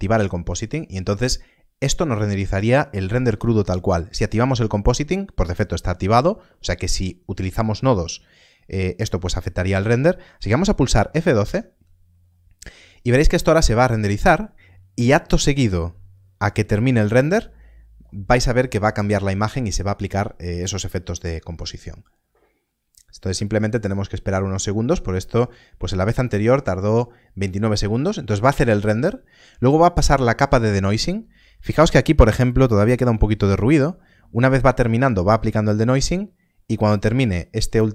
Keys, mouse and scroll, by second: 1.3 click, 3.9 click, 11.4 F12, 13.5-15.5 scroll down 1.